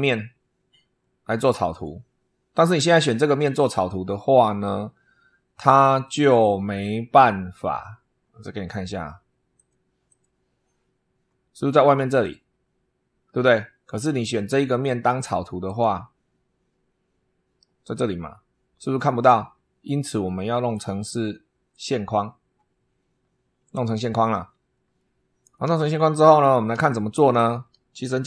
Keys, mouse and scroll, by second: 1.6 click, 9.4 click, 10.0 click, 15.6 click, 20.6 click, 21.6 click, 24.8 shift+middle click, 25.8 shift+scroll up 2, 26.8 shift+middle click.